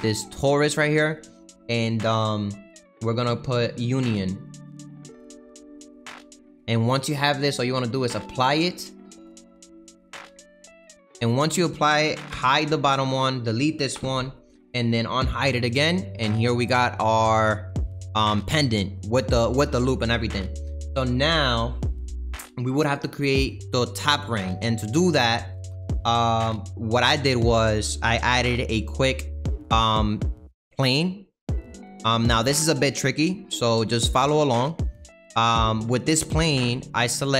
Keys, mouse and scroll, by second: 5.9-10.0 middle drag, 10.0 click, 12.3 h, 13.2 click, 13.9 Delete, 15.3 click, 16.2 scroll up 3, 16.5-18.2 middle drag, 18.2-18.8 scroll down 4, 18.8-30.9 middle drag, 30.9 shift+a, 31.3-32.3 scroll down 7, 32.3 middle click, 33.3-33.6 scroll down 3, 33.6-35.3 middle drag, 35.3 Tab, 36.6 2.